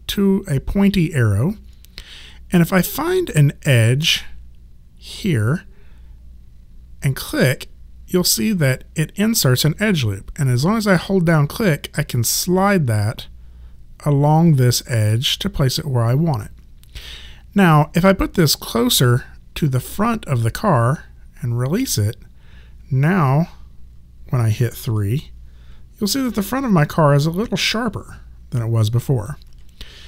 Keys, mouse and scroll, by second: 7.2 click, 24.8 3, 26.3 alt+click, 27.6 alt+right click.